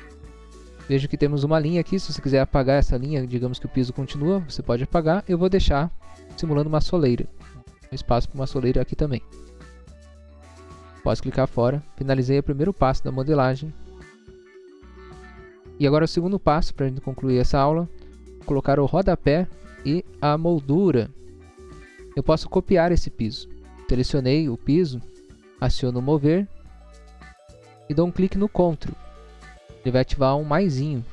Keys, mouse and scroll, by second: 0.0 click, 0.7 scroll up 1, 5.3 click, 7.0 scroll down 1, 7.5 scroll up 1, 8.3 click, 9.5 scroll down 1, 10.1 scroll down 1, 11.2 click, 11.6 scroll down 1, 12.1 middle click, 12.9 middle click, 13.1-13.4 scroll down 1, 13.4 scroll up 1, 22.2 click, 23.4 middle click, 23.8 middle click, 24.5 click, 26.9 click.